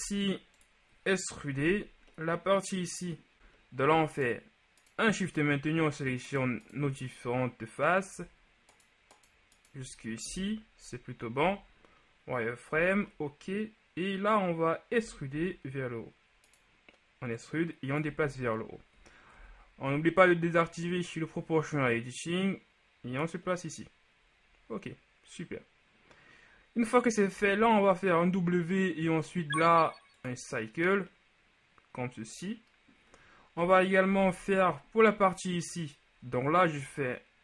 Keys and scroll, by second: 0.1 ctrl+Tab, 10.3 shift+KP_1, 11.5 z, 15.1 e, 15.4 z, 18.4 ctrl+z, 19.5 ▯, 27.5 w, 33.7 KP_3, 34.3 z.